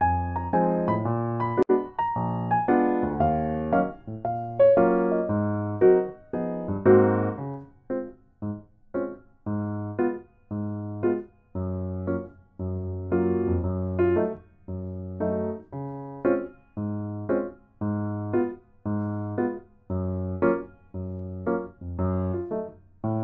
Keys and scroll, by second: 2.6 8, 3.0 ctrl+s, 3.5 F2, 14.1 ctrl+a, 14.6 ctrl+a, 14.9 ctrl+a, 17.0 ctrl+a, 18.3 8, 20.8 Tab.